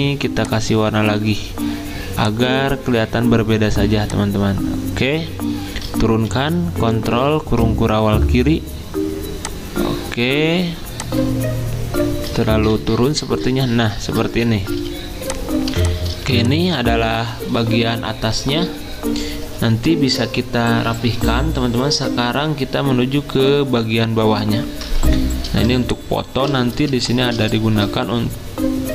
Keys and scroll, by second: 6.3 ctrl+[, 6.9 ctrl+[, 12.7 ctrl+[, 14.7 z, 15.7 z, 16.2 v.